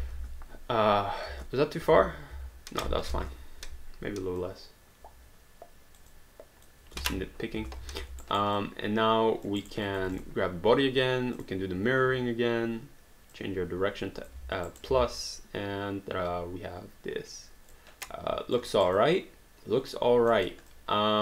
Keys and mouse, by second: 0.1 space, 1.3 space, 2.4 ctrl+z, 3.1 ctrl+y, 4.5 click, 6.1 click, 7.0 space, 7.9 alt+d, 8.2 alt+right click, 8.6 alt+click, 9.6 alt+right click, 9.8 alt+click, 10.1 click, 11.4 click, 13.4 click, 14.7 alt+right click, 14.9 alt+d, 15.3 alt+click, 18.0 alt+click, 18.7 alt+right click, 19.1 alt+click, 20.3 alt+middle click, 20.7 alt+click.